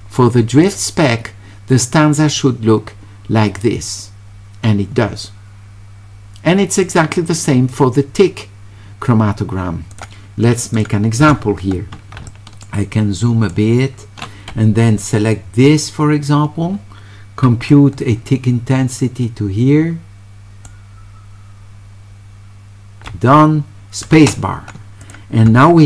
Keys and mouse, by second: 0.7 click, 6.8 click, 9.9 click, 10.8 click, 12.3 shift+right click, 13.2 shift+right click, 17.7-20.7 right drag, 24.1 space, 25.1 click.